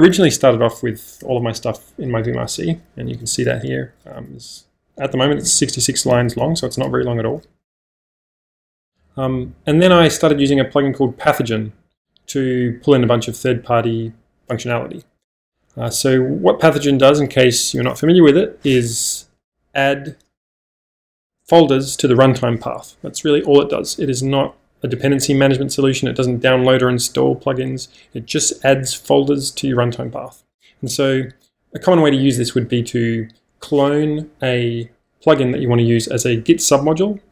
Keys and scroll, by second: 0.0-0.9 typing, 1.3 Return, 3.1 g, 3.2 g, 4.2 shift+g, 6.3 g, 6.4 g, 7.5 -.